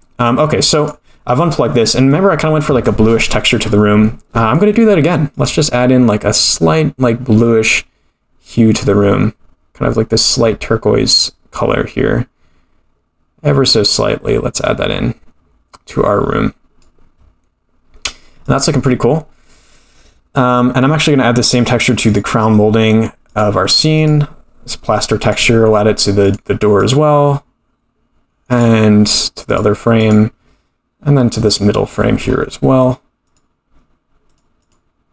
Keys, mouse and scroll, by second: 0.8 click, 1.8 middle click, 3.7-4.4 scroll up 8, 4.4 middle click, 5.3 click, 20.8 middle drag, 22.1 click, 23.3-24.8 drag, 25.2 click, 26.2-27.6 drag, 28.5 click, 29.5-31.3 drag, 31.5 click, 32.3 scroll up 4, 33.2 click, 34.3 click, 34.6-35.1 drag.